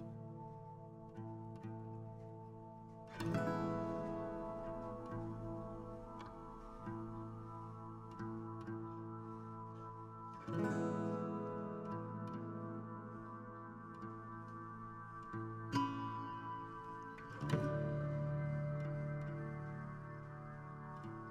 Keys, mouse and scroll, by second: 1.4 g, 2.4 r, 5.3-7.0 shift+drag, 7.7 s, 10.8-12.4 drag, 17.5-19.1 shift+drag, 19.1 a, 19.7-21.3 right drag.